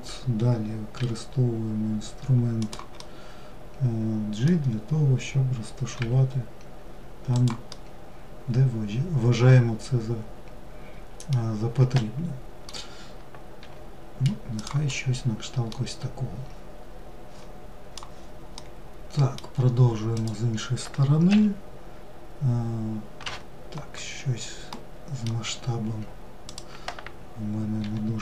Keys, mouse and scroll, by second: 0.4 g, 2.4-5.4 middle drag, 5.4 g, 7.2-10.2 middle drag, 11.4-13.0 middle drag, 13.0 g, 14.3-17.4 middle drag, 18.1-19.7 middle drag, 19.7 click, 23.7-24.3 scroll up 1, 24.3 middle click, 25.0 s.